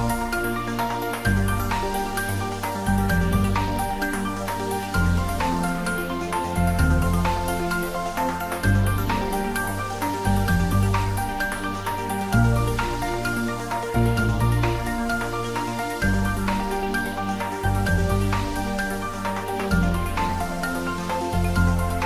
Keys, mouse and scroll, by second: 0.5 Right, 1.2 click, 2.9 s, 3.2 y, 8.8 y, 9.0 click, 11.6-12.5 typing, 12.8 Up, 15.8 space, 18.2 click, 19.5-20.6 scroll up 1.